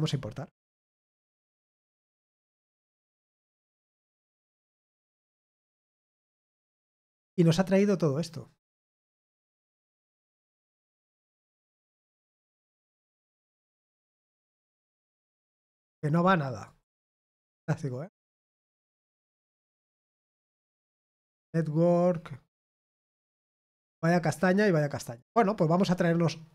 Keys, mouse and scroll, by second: 0.0 click, 14.2 click, 15.5 click, 16.6 click, 17.4 click, 21.3 click, 25.0 click.